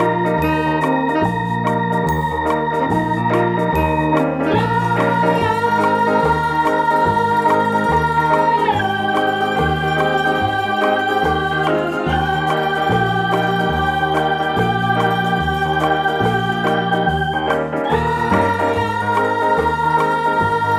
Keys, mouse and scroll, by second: 0.3 Tab, 2.3 click, 2.9 right click, 3.2-5.8 middle drag, 4.1 e, 5.8 click, 6.8-8.5 drag, 8.5 ctrl+b, 12.0 click, 12.2-14.0 middle drag, 12.3-12.7 scroll down 2, 13.0 Tab, 14.0 right click, 14.2 Tab, 15.3 right click, 16.0 shift+right click, 16.5-17.9 middle drag, 17.9-19.1 drag, 19.1 e.